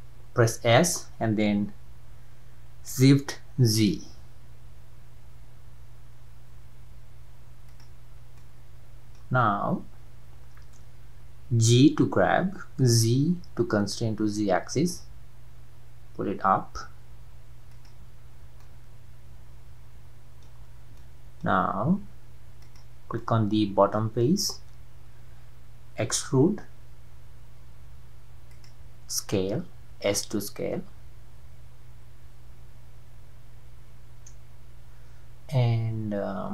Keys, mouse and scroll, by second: 0.8 s, 8.1-8.4 scroll down 2, 8.4-11.5 middle drag, 11.6 g, 18.2-18.6 scroll up 2, 18.6-20.5 middle drag, 20.5 scroll up 1, 20.7 scroll down 3, 21.0-22.6 middle drag, 22.6 click, 23.2-26.4 middle drag, 26.4 e, 29.9 s.